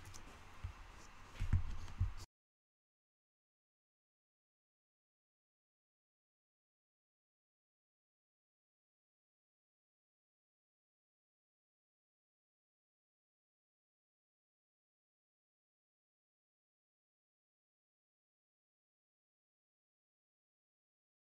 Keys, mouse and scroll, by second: 4.2-4.8 scroll up 4, 5.6 click, 9.0-9.7 scroll down 2, 9.7-10.7 scroll up 2, 10.7 click, 12.1-13.2 scroll down 1, 13.2-16.2 drag, 16.2-17.4 shift+middle drag, 17.4-19.9 scroll up 1, 21.2 click.